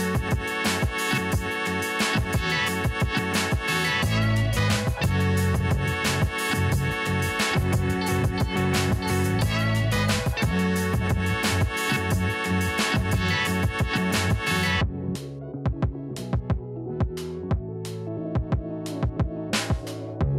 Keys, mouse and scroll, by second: 0.1-7.7 drag, 7.7-9.0 scroll down 1, 9.0 click, 10.2-10.8 scroll down 1, 10.8 click, 11.3-12.2 scroll up 1, 12.2 click, 14.9-15.3 scroll up 1, 15.3-15.9 scroll down 1, 15.9 click, 16.9-17.8 scroll down 1, 17.9 click.